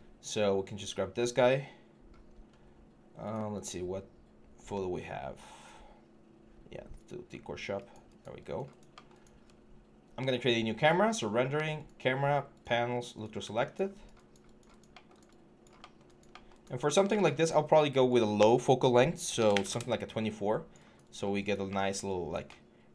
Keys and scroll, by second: 19.2 2, 19.3 4, 19.5 Return.